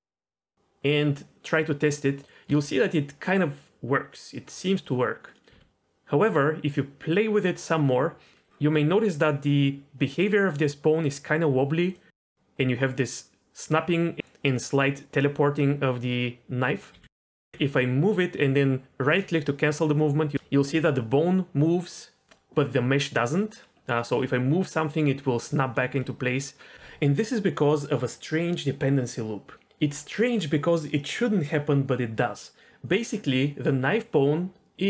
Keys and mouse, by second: 2.2 g, 2.5 g, 4.8 click, 5.2 click, 5.5 r, 7.0 r, 16.7 click, 17.0 g, 17.4 g, 24.0 click, 24.2 f, 32.6 ctrl+z.